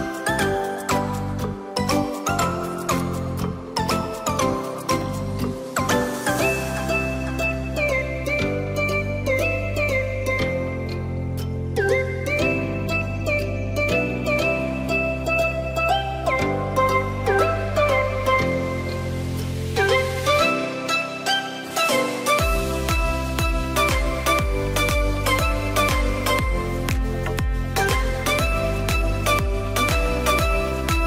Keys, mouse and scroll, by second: 0.7-1.4 scroll down 2, 1.4-1.7 scroll up 1, 1.7 click, 2.0 Tab, 2.4 click, 3.6 ctrl+r, 6.3 KP_7, 7.6-8.3 scroll up 1, 8.3-9.2 scroll up 1, 9.2 ctrl+b, 12.9 click, 13.3 click, 14.2 ctrl+r, 15.9 ctrl+b, 19.0 click, 19.4 click, 19.8-20.3 scroll down 1, 20.3-21.3 middle drag, 21.3-22.1 scroll down 2, 22.1 scroll down 1, 22.2 shift+middle click, 22.5 scroll up 3, 22.8-23.4 scroll down 1, 23.4-25.5 middle drag, 25.5-27.5 scroll up 1, 27.5 scroll up 1, 27.7 click, 28.4 click, 29.0 shift+click, 29.7 shift+click, 30.6 shift+click.